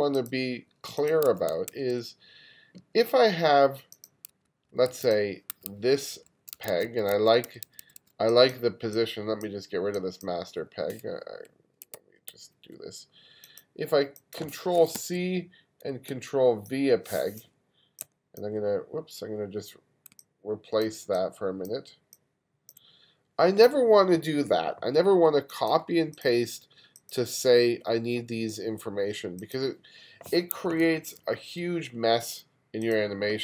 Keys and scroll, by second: 1.3 1, 1.7 2, 4.3 1, 7.5 2, 12.0 super+z, 15.0 super+c, 16.1 super+v, 18.0 z, 30.7 1.